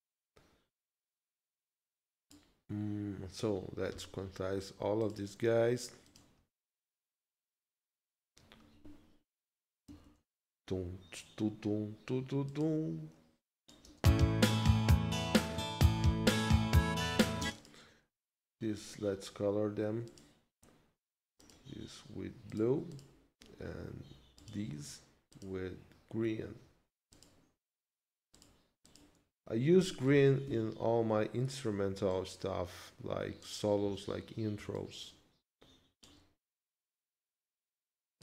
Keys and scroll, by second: 13.9 space, 17.4 space, 30.4 ctrl+Left.